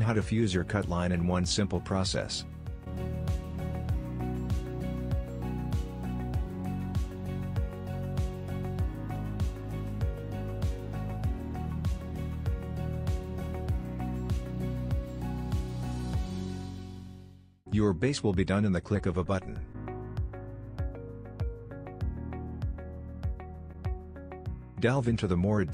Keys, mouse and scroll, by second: 0.5 f, 1.1-2.0 scroll down 1, 2.0 scroll down 1, 2.6-4.1 middle drag, 2.9 Tab, 4.1 click, 5.7 scroll up 1, 5.9-12.9 shift+middle drag, 7.7 scroll up 2, 12.3-12.9 scroll down 2, 12.9 click, 14.1 click, 14.3-14.6 scroll down 2, 14.6-17.7 shift+middle drag, 14.8 scroll up 2, 17.7 click, 18.4-18.9 scroll down 2, 18.9-24.6 middle drag, 19.8 scroll up 1, 19.9 Tab, 20.4 scroll up 1.